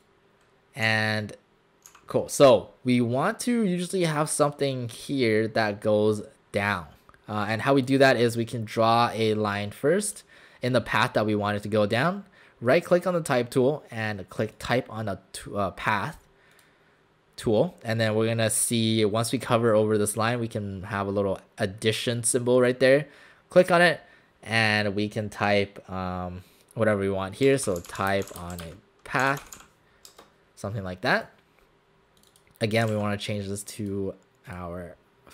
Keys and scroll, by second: 0.9 w, 1.9 w, 27.5 Caps_Lock, 27.7-30.1 typing, 30.1 Caps_Lock, 32.9 ctrl+a.